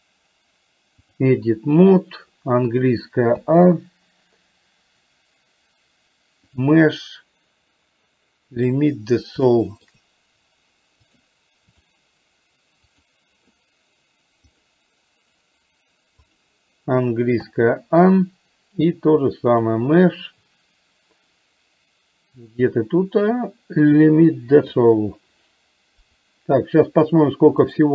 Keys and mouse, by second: 6.6-8.9 drag, 9.4 shift+middle click, 11.2 click, 12.9 click, 14.6-16.7 drag, 19.6-24.9 drag, 27.7 click.